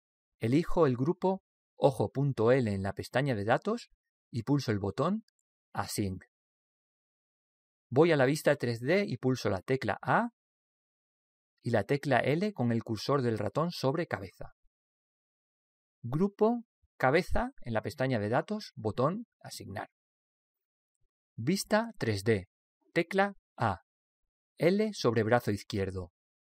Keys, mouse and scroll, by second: 2.3 click, 6.4 click, 10.4 a, 15.1 l, 17.5 click, 20.0 click, 23.7 a.